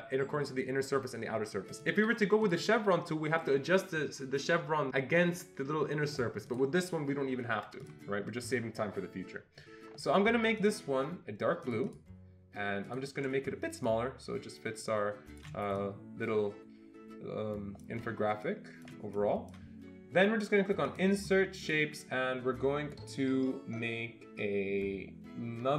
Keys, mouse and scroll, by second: 1.7 click, 2.5 click, 6.5 click, 7.8-10.6 click, 11.6 click, 11.9 double click, 12.8 click, 14.2-15.4 shift+drag, 16.1-18.0 drag.